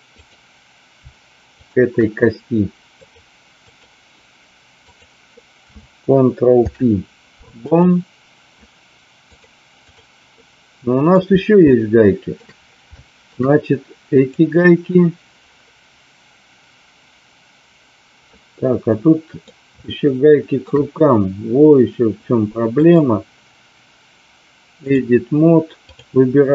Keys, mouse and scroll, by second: 0.1 click, 2.9-3.8 drag, 4.8 click, 6.5 ctrl+p, 9.2 click, 10.3 middle click, 11.5-12.3 shift+middle drag, 12.9-13.3 shift+middle drag, 14.2 click, 18.3-19.4 middle drag, 19.8-20.5 shift+middle drag, 22.8 click, 25.9 click.